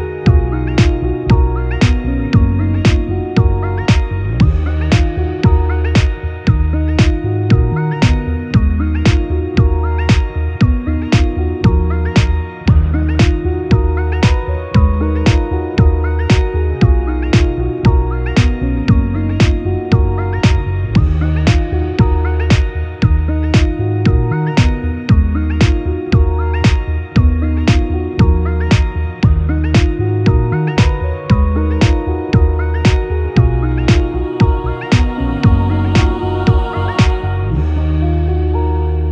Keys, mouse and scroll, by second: 0.7 alt+v, 4.9 ctrl+a, 6.9 Tab, 10.1 alt+click, 10.2 alt+middle click, 10.4 alt+click, 10.7 shift+middle click, 11.0 alt+shift+click, 11.1-30.0 alt+shift+middle drag, 11.4 ctrl+x, 11.7 Tab, 12.4 alt+v, 14.1 Tab, 17.1 1, 17.9 g, 19.1 click, 19.2 g, 20.7 g, 30.0 shift+click, 30.1-32.5 shift+middle drag, 32.5 click, 32.6 Tab, 32.6-39.1 middle drag, 33.1 alt+v, 34.8 ctrl+2.